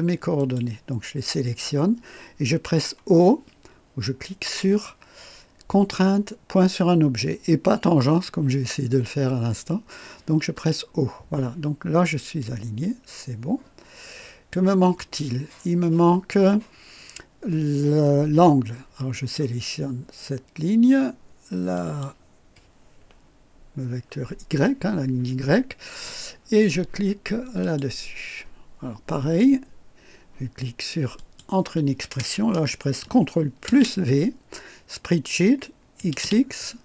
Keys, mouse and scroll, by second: 0.4 click, 10.5 o, 12.4-14.7 drag, 19.1 click, 21.7 click, 27.6 click, 31.2 click, 33.7 ctrl+v, 36.0 x.